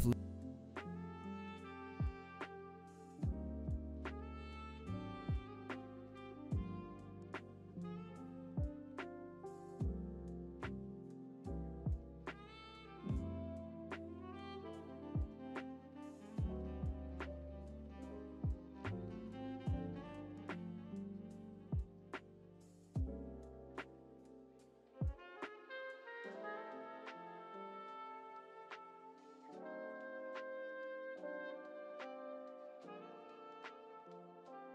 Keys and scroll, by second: 9.7 ctrl+Home, 14.5 s, 32.5 ctrl+c, 34.4 ctrl+v.